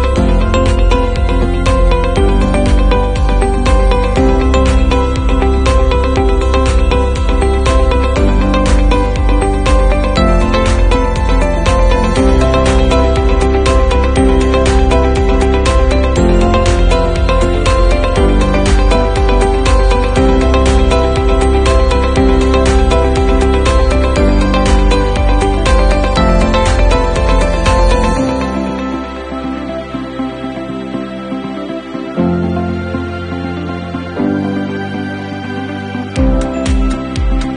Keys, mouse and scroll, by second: 8.2 click, 23.3 Up, 23.6 Up, 24.0 Up, 24.3 Up, 24.6 Up, 24.9 Up, 25.2-26.1 Up, 25.6 Up, 25.8 Up, 25.9 Up, 26.3 Up, 26.5-28.8 Up, 31.9 Down, 32.3 Down, 32.9 Down, 33.2 Down, 33.4-34.8 Down, 35.5-37.0 Down.